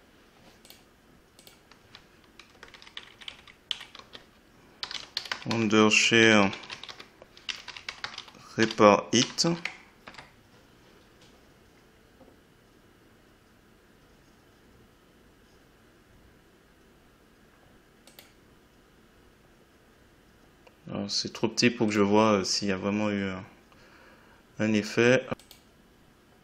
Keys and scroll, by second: 2.5 Right, 2.9 Left, 3.9-5.4 typing, 6.7 e, 6.9 space, 7.5 r, 8.6 r, 9.2 i, 9.5 t, 10.0 Return.